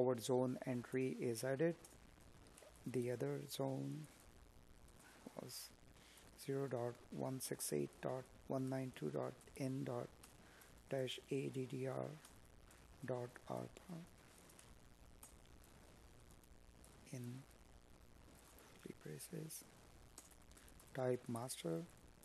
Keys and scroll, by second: 1.1 space, 11.5 space, 17.4 Tab, 18.2 space, 19.6 Tab, 21.5 space.